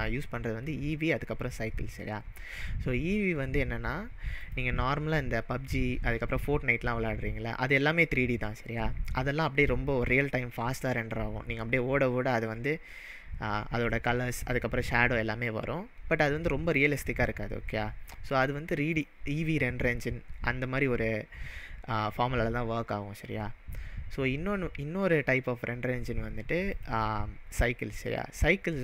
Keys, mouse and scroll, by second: 4.4 click, 18.9-22.0 drag, 26.7 click, 27.5-28.8 drag.